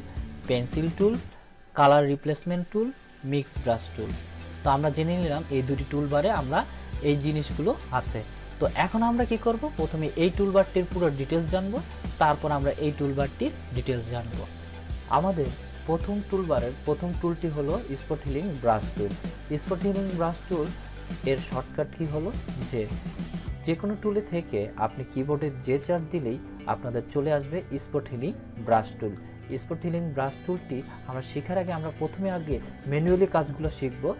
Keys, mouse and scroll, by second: 5.5-8.4 drag, 18.3-19.3 drag, 23.6 click.